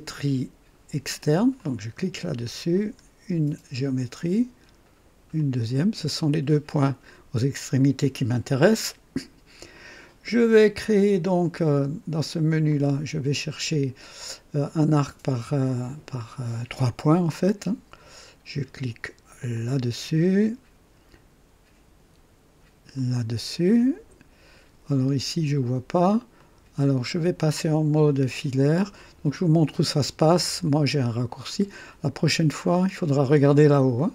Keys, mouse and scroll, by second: 1.5 click, 2.7 click, 5.3 click, 12.6 click, 16.7 click, 19.5 click, 22.9 click, 26.3 click, 31.4 click.